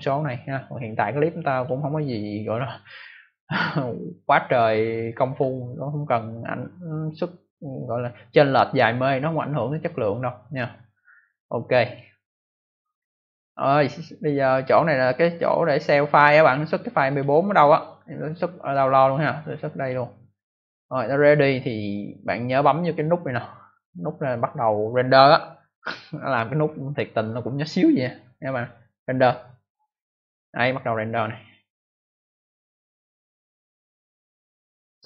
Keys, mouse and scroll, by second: 11.7 click, 11.9 click, 17.0 click, 17.1 click, 19.7 click, 19.8 click, 29.1 click, 29.2 click.